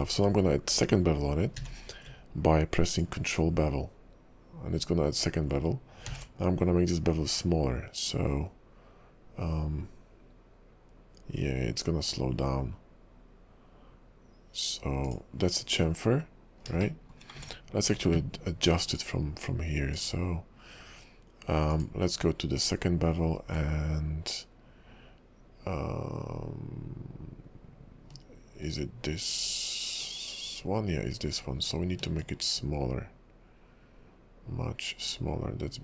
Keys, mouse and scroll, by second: 1.6 q, 17.0 shift+middle click, 17.4 ctrl+`.